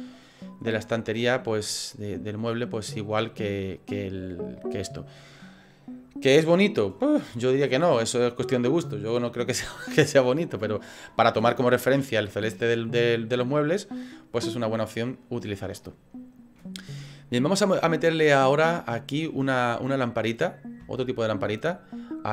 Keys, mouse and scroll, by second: 2.7 right click, 19.8 click, 21.0 shift+middle click, 21.5 middle click.